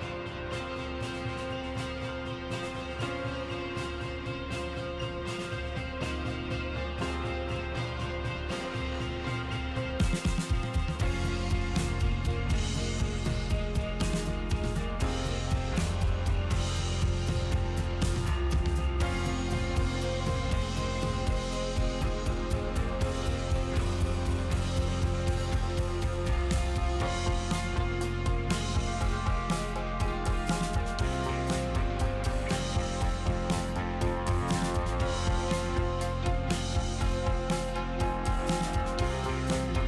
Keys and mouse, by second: 0.1 click, 2.0 click, 4.1 middle click, 5.0 click, 5.3 click, 5.6 click, 7.3 click, 8.3 f, 8.4 f, 9.5 shift+click, 10.4 middle click, 11.5 shift+click, 12.0 shift+click, 13.3 ctrl+z, 13.6 shift+click, 14.5 shift+click, 15.6 shift+click, 16.5 middle click, 19.5 middle click, 20.9 middle click, 22.5 middle click, 24.2 shift+click, 26.9 shift+click, 29.0 click, 29.7 click, 30.3 ctrl+z, 31.1 f, 32.3 f, 32.4 f, 33.1 click, 35.3 click, 36.4 ctrl+z, 36.9 ctrl+z, 36.9 ctrl+click, 37.4 ctrl+z.